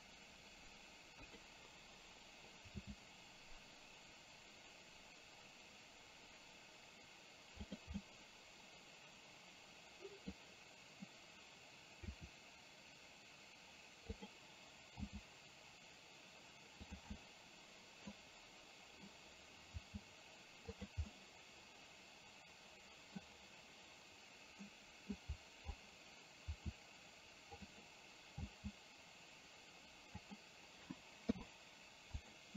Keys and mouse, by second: 2.8 g, 8.2-10.3 middle drag, 12.2 r, 15.0 g, 17.2-18.2 middle drag, 19.8 g, 21.2-23.2 middle drag, 24.8 middle click, 26.6 r, 28.6 g, 31.3 i.